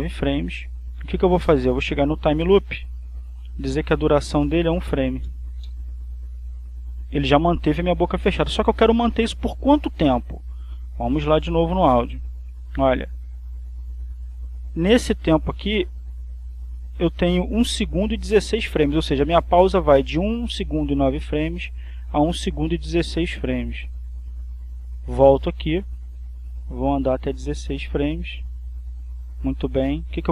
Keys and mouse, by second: 3.3 click, 4.5 click, 5.2 1, 5.6 f, 6.0 Return, 11.8-12.9 drag, 14.0 click, 24.0-25.4 drag, 27.0-29.7 drag.